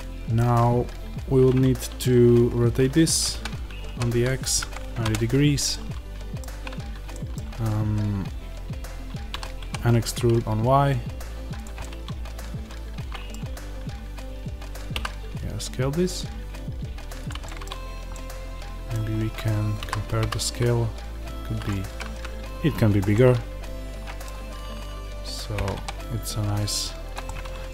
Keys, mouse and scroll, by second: 3.3 r, 6.3-7.0 scroll, 9.2 e, 11.5 click, 11.7 middle click, 14.8 s, 17.2 click, 17.4 middle click, 17.6-18.0 scroll down 1, 18.0 middle click, 19.0 scroll up 1, 19.7-21.6 middle drag, 19.7 a, 21.6 click, 21.8 g, 22.9 click, 23.1-27.7 middle drag, 25.6 g.